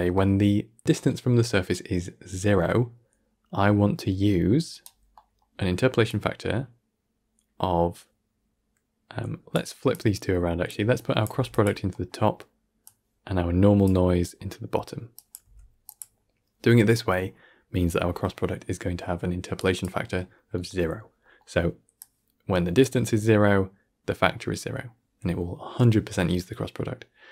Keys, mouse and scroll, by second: 0.0-2.1 middle drag, 4.0 scroll down 7, 4.3 middle click, 5.0-6.0 middle drag, 6.0-9.0 drag, 9.8 click, 10.8 click, 11.2 g, 11.8 middle click, 12.7 click, 14.1 scroll down 1, 14.3-15.0 middle drag, 15.0 click, 15.3 g, 17.0 scroll up 1, 17.2-19.5 middle drag, 19.5-21.1 drag, 21.1-21.9 middle drag, 21.9 click.